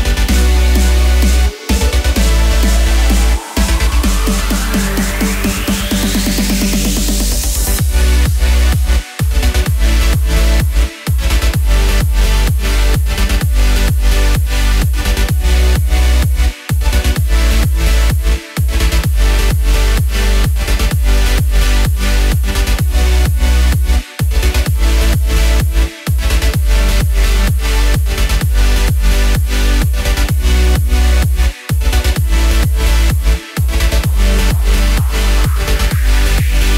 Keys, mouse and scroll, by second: 0.0 shift+d, 0.8 click, 1.8 middle click, 2.5 click, 4.4 KP_0, 4.8 space, 6.4 space, 6.8 click, 10.2 middle click, 11.0-11.3 scroll down 4, 11.4 middle click, 12.3 middle click, 13.8 click, 15.4 s, 17.4 KP_0, 18.0 click, 18.4 KP_0, 19.7 s, 22.0 a, 22.1 a, 23.3 middle click, 24.4 click, 25.1 click, 25.5 shift+a, 27.0 click, 27.9 click, 29.7 s, 31.4 click, 33.0 g, 34.9 shift+a, 36.5 click.